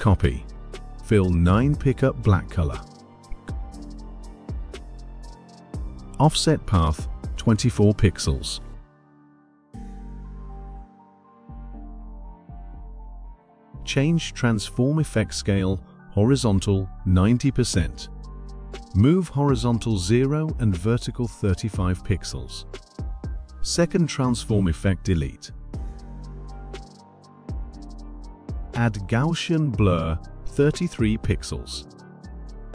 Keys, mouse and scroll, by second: 1.3 click, 4.3 click, 5.9 click, 8.1-11.5 typing, 12.0 click, 12.0 click, 13.2 click, 15.8 9, 17.2-18.7 drag, 19.3 click, 19.5 click, 20.0-20.3 typing, 23.0 click, 24.2 click, 26.3-27.7 drag, 29.9 click, 32.1 click, 32.5-32.7 typing.